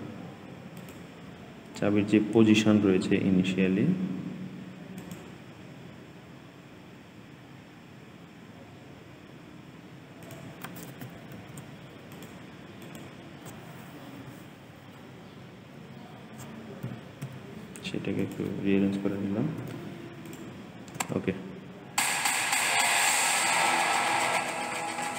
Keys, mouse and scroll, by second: 0.6 click, 1.5-2.4 scroll down 6, 2.4 scroll down 1, 4.8-8.0 drag, 10.1 click, 11.2 ctrl+c, 12.0 click, 12.7 click, 14.1 Delete, 16.7 g, 20.2 i, 20.8 space, 22.5 click.